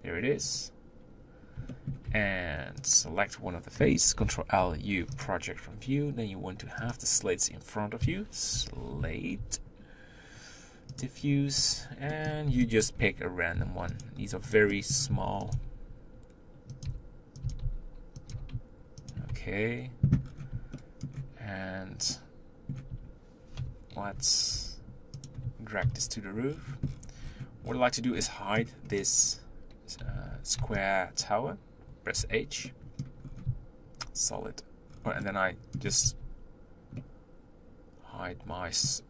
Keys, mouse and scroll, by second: 0.6-1.7 drag, 1.7 shift+middle click, 2.1 Tab, 2.9 click, 4.1 ctrl+l, 5.2 u, 7.0 click, 12.9 b, 13.0-13.6 scroll up 2, 13.6 s, 14.0 g, 14.8 middle click, 15.2 s, 17.4 s, 18.3 g, 19.3 Tab, 19.7 scroll up 2, 20.3-20.7 scroll down 4, 20.7-22.6 shift+middle drag, 23.6 KP_7, 24.7 g, 25.8 ctrl+KP_Decimal, 26.5-28.2 scroll down 19, 28.2-29.0 middle drag, 29.0 click, 30.3 z, 32.2 h, 32.7-33.2 middle drag, 33.2-34.0 scroll up 2, 34.0 z, 34.4-34.9 scroll up 1, 34.9-35.2 scroll down 2, 35.2-36.3 middle drag, 36.3 ctrl+z, 37.0-39.0 middle drag.